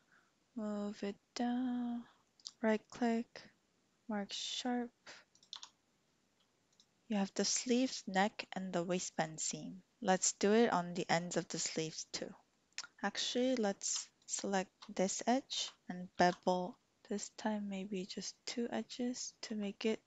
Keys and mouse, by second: 2.2 typing, 2.4-4.4 drag, 5.3 click, 5.6 Tab, 12.2 shift+click, 16.1 ctrl+b.